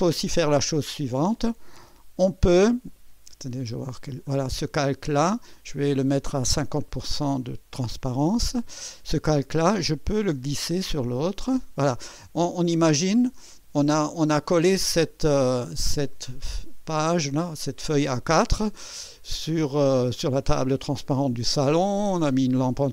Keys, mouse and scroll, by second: 3.7 click, 4.3 click, 5.3 click, 6.2 click, 9.3-12.6 drag, 12.9 scroll down 2, 13.8 ctrl+scroll down 2, 15.2-16.3 middle drag.